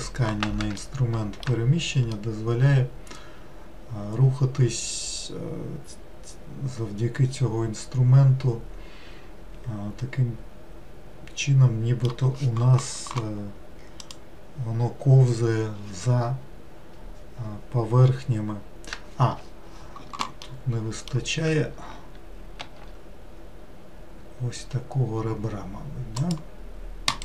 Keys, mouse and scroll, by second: 0.8-5.2 shift+middle drag, 20.5-22.7 middle drag, 22.7 ctrl+r.